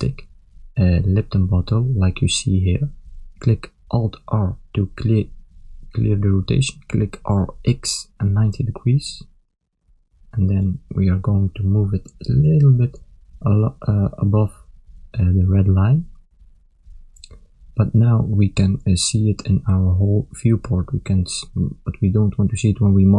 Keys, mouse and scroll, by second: 4.8 alt+r, 6.2 r, 9.7 KP_1, 12.2 click, 14.3 click, 20.1 ctrl+middle click, 20.9 middle click.